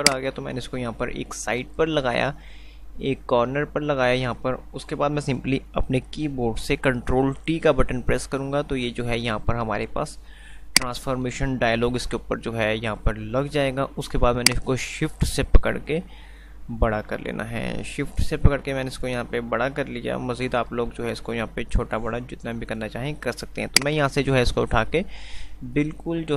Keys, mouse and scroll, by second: 0.3-4.5 drag, 7.7 ctrl+t, 10.9 click, 12.0 t, 14.5-23.8 drag, 19.6-22.0 shift+drag, 23.8-26.3 drag.